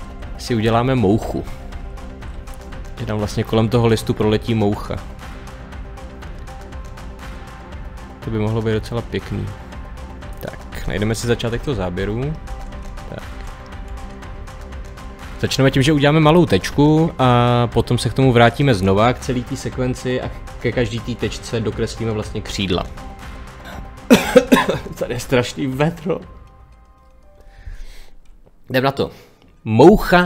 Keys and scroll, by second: 1.9 Page_Up, 11.4 Page_Down, 12.7 Page_Up, 13.7 Page_Down.